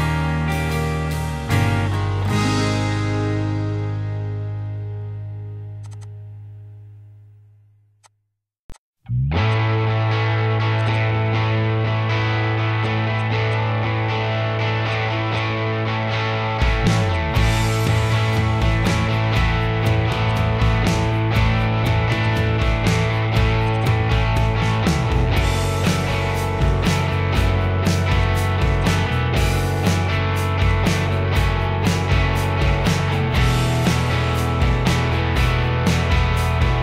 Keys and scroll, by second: 1.7 p, 4.6-5.6 typing, 6.5 ctrl+z, 6.7 ctrl+z, 7.0 Escape, 7.5 r, 9.1-10.6 typing, 11.3 ctrl+g, 11.7-12.4 typing, 17.8 r, 18.4 l, 20.0 e, 20.7 space, 22.0-23.5 typing, 24.5 ctrl+g, 25.2 m, 28.2 m, 28.9 s, 31.5-32.6 typing, 36.0 l.